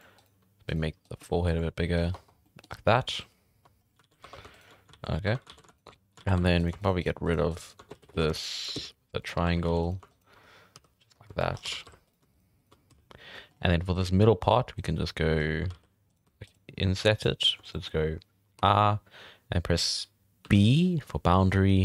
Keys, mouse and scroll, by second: 0.0-1.2 typing, 0.1 right click, 1.0 right click, 2.0-2.4 scroll down 2, 2.1 Tab, 2.4 middle drag, 2.7 scroll up 5, 3.6 scroll down 1, 3.8 scroll up 5, 4.0 alt+a, 4.2 1, 4.5 alt+shift+right click, 4.7 scroll down 3, 4.7 middle click, 4.9 alt+a, 5.1 scroll up 1, 5.2 1, 5.5 alt+a, 5.7 alt+shift+right click, 6.2 alt+a, 6.4 2, 6.6 right click, 6.8 shift+right click, 7.0 shift+right click, 7.2 shift+right click, 7.5 shift+right click, 7.9 ctrl+z, 8.1 ctrl+z, 8.4 shift+right click, 8.5 shift+right click, 8.7 x, 9.4 1, 9.6 alt+a, 9.8 right click, 10.1 shift+right click, 10.7 j, 11.1 scroll down 4, 11.4 shift+middle drag, 11.5 scroll up 4, 11.7 alt+a, 11.8 3, 12.0 right drag, 12.3 shift+right drag, 12.6 shift+right click, 12.9 x, 13.2 scroll down 1, 13.3 middle drag, 13.5-14.3 scroll up 5, 14.3-14.7 middle drag, 14.9 scroll down 4, 15.3-15.7 scroll up 3, 15.7 alt+a, 16.1 right click, 16.4 shift+right click, 17.2 shift+right click, 17.4 shift+right drag, 17.6 scroll down 4, 17.7 middle drag, 17.9-18.5 scroll up 3.